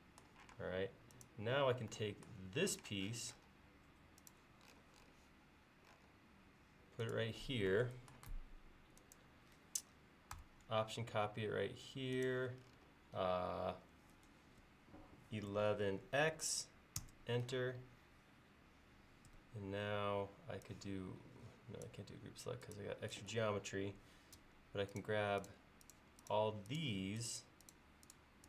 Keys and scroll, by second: 0.5 space, 2.7 m, 15.3-16.1 typing, 19.3 space.